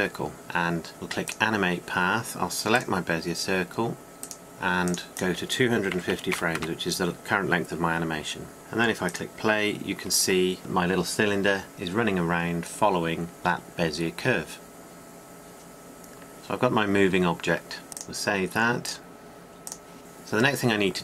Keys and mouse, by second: 3.1-8.5 drag, 10.6-20.0 drag.